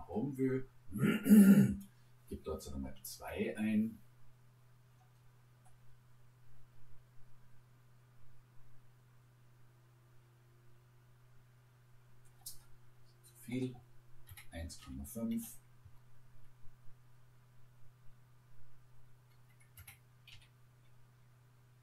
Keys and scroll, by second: 2.8 2, 3.3 Return, 14.3 1, 14.8 ., 15.4 5, 15.8 Return, 19.8 1, 20.3 ..